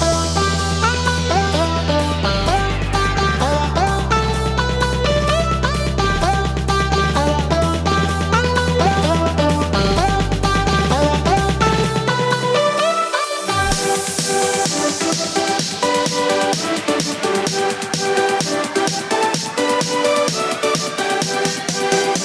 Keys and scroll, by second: 2.2 ctrl+j, 10.1 ctrl+g, 18.3-20.0 typing.